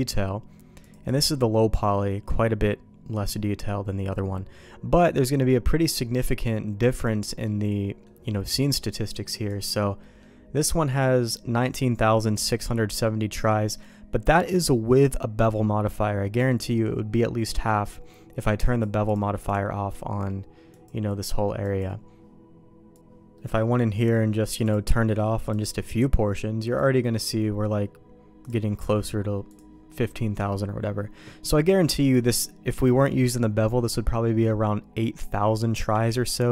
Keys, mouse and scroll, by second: 0.8 click, 1.0 click, 6.9 click, 7.4 middle click, 9.1 click, 9.4 click, 10.0 middle click, 12.7 middle click, 18.6 click, 19.0-20.5 drag, 20.7 click, 21.6 click, 23.3 middle click, 24.6-25.6 drag, 26.6 click, 28.4-29.5 drag, 36.1 ctrl+z.